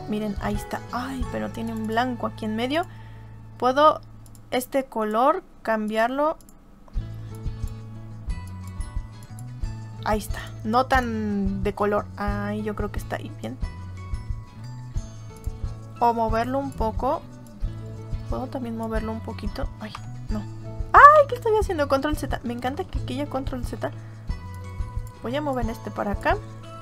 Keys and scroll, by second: 19.8 Delete, 21.2 ctrl+z, 22.7 ctrl+z.